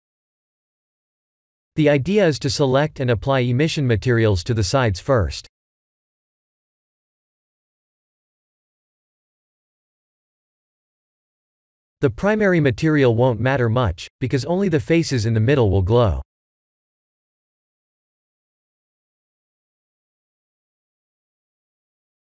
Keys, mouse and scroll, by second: 0.4 middle click, 3.1 click, 3.6 middle click, 5.0 shift+click, 5.5-7.4 middle drag, 8.7 click, 12.5-14.5 drag, 17.9 click, 19.4 click, 20.4 click, 21.4-22.3 drag.